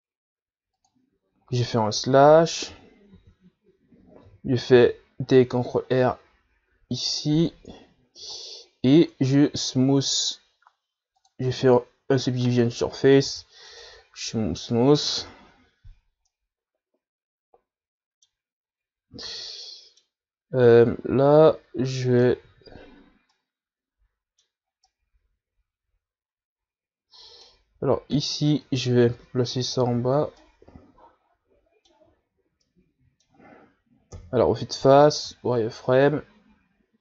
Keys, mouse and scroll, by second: 3.9 KP_Divide, 4.5 z, 6.0 ctrl+r, 9.4 Tab, 10.5-13.5 drag, 14.5 w, 16.5 KP_Divide, 17.5-19.8 middle drag, 19.8-20.5 scroll up 3, 20.5 Tab, 20.9-22.1 middle drag, 22.1-23.7 drag, 23.7 ctrl+z, 24.6-29.1 middle drag, 29.4-31.2 drag, 31.2 ctrl+z, 31.7-35.4 middle drag, 35.4 KP_1, 36.3 z, 36.6-36.9 scroll down 4, 36.9 scroll up 2.